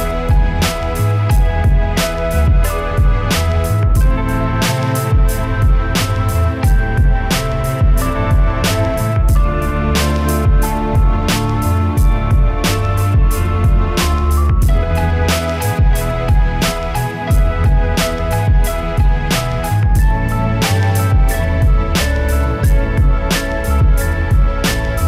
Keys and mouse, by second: 1.3 right click, 1.7 middle click, 2.2 right click, 3.0 e, 3.1 KP_1, 3.4 g, 4.2 click, 4.2-5.3 right drag, 4.5 f, 6.0 right click, 6.5 e, 6.6 KP_1, 6.8 g, 8.0-9.4 drag, 9.5 z, 10.4 k, 11.7 k, 12.8 a, 13.2 click, 13.4 right click, 13.7 f, 15.7-17.9 right drag, 17.9 KP_1, 18.7 z, 18.7 a, 18.9 b, 19.8 click, 20.1 right click, 20.4 e, 20.5 KP_1, 21.3 right click, 21.6 click, 21.9-24.3 typing, 22.3 click, 23.4 click.